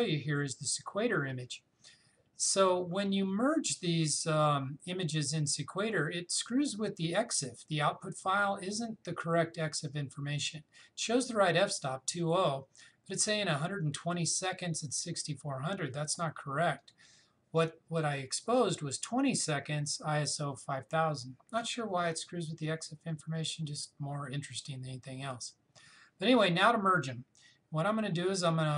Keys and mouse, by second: 16.8 click, 21.6 click.